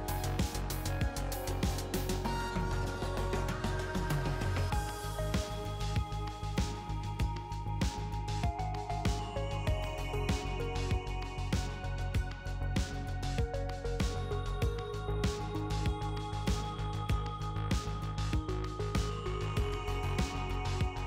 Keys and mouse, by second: 0.9 ctrl+r, 2.6 ctrl+r, 4.7 ctrl+r, 6.6 ctrl+r, 8.0-9.5 middle drag, 9.5-10.1 ctrl+z, 10.8-12.0 drag, 12.7-14.8 drag, 14.5 e, 15.4-16.6 drag, 17.4 ctrl+z, 18.1 click, 19.8-21.0 middle drag.